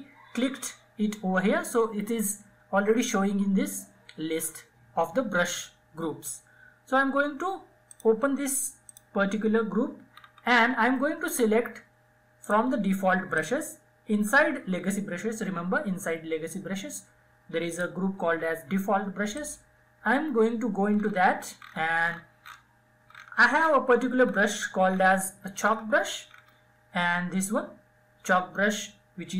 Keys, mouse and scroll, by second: 6.6 click, 8.9-9.2 scroll down 1, 11.1 click, 16.4 click, 19.6-22.0 scroll down 1.